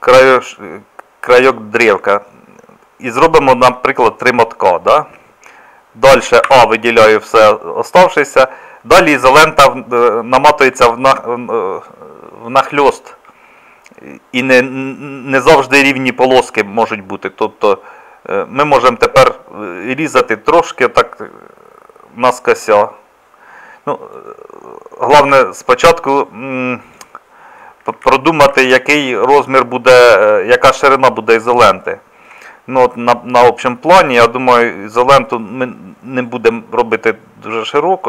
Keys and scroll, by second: 6.5 a, 25.2 Escape, 28.0 ctrl+z, 28.6 ctrl+z.